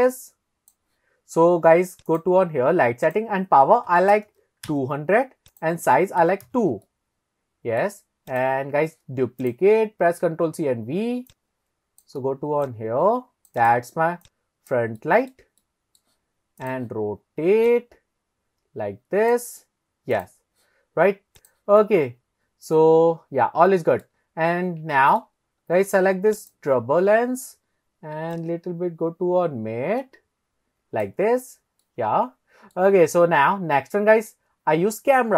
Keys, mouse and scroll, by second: 2.1 click, 3.1-4.3 drag, 4.3 KP_0, 4.6 click, 5.5 click, 6.9-7.9 middle drag, 8.3 click, 9.4 click, 10.2 ctrl+c, 10.5 ctrl+v, 11.3 click, 12.7 click, 13.6 click, 14.3 click, 15.0 shift+middle click, 15.6-16.0 middle drag, 16.6 click, 17.7 click, 20.2 click, 21.4 click, 21.8-24.1 middle drag, 24.4-24.8 scroll up 2, 24.9 shift+middle drag, 25.4-26.0 scroll up 1, 26.0 scroll up 1, 26.4 click, 28.3 click, 31.9-32.8 middle drag, 33.0-33.6 scroll down 1, 33.6 scroll down 1, 33.8-34.4 middle drag.